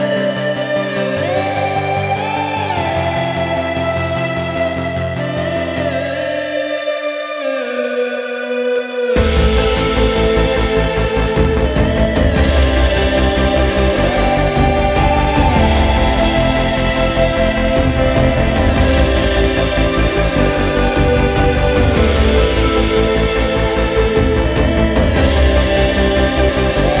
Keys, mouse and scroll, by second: 0.8 drag, 1.4 right click, 2.3 click, 2.9 right click, 3.6 drag, 4.2 click, 5.7-7.3 drag, 7.8 right click, 8.7 drag, 11.4 click, 12.0 click, 12.9 shift+click, 13.6 right click, 14.4 drag, 14.6 ctrl+scroll up 2, 15.8 scroll up 2, 16.4 click, 17.2-17.8 drag, 17.9-19.4 middle drag, 19.6 click, 21.0-21.4 drag, 21.6 click, 22.3 click, 23.0 scroll up 1, 23.6-24.1 drag, 24.3-24.7 drag, 24.9-25.3 drag, 25.5 click, 26.8-27.0 drag.